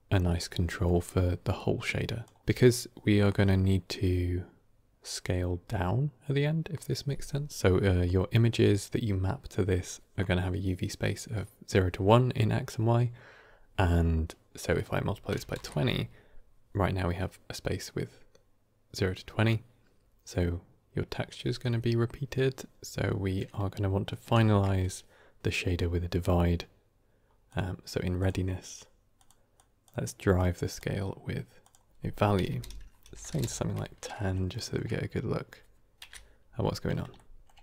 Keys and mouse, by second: 0.6 middle drag, 1.5-2.1 drag, 14.7-16.0 drag, 24.1 middle click, 24.3 shift+a, 29.5 click, 30.3-30.6 drag, 31.6-33.6 drag, 33.0 BackSpace, 34.0-34.6 shift+middle drag, 35.9 KP_7, 37.0 ctrl+middle drag.